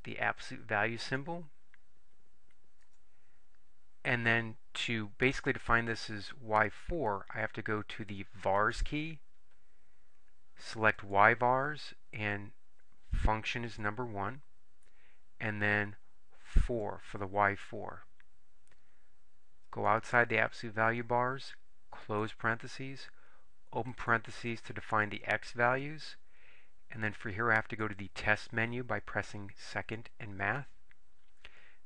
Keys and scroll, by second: 1.1 Right, 2.9 Return, 11.1 Right, 13.9 1, 16.9 4, 19.9 Right, 22.2 ), 24.1 (, 26.1 x.